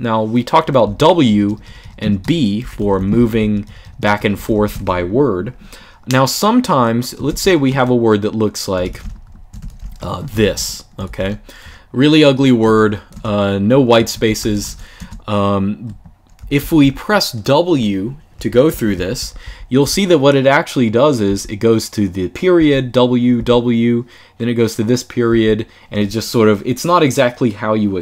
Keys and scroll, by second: 0.3-4.8 typing, 7.0-12.4 typing, 12.9 Escape, 13.6-14.9 typing, 16.3-18.4 typing, 23.0-23.7 typing.